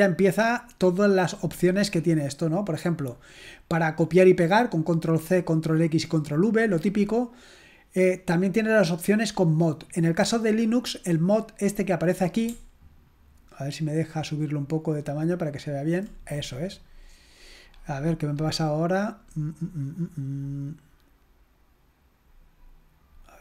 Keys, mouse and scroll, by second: 1.3 click, 3.2-3.6 scroll down 1, 6.7-7.6 scroll down 2, 13.3-13.6 scroll up 1, 16.2 scroll up 1, 16.4-17.5 scroll down 3, 17.5-17.9 scroll up 1, 23.2-23.4 scroll up 1.